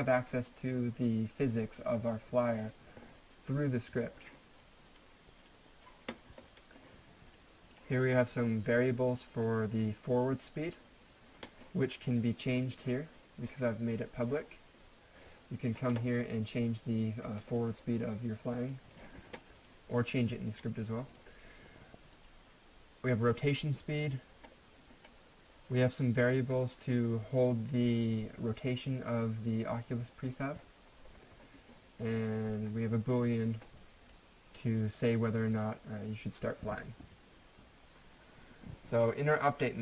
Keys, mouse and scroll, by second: 5.4 click, 6.5 middle click, 7.4 click, 12.1 click, 12.3-12.8 typing, 16.4 typing, 18.4 click, 24.0-24.4 scroll down 1, 25.0-26.8 scroll up 1, 31.1-32.3 scroll down 1, 34.4-36.3 scroll down 1, 37.6-39.4 scroll down 1.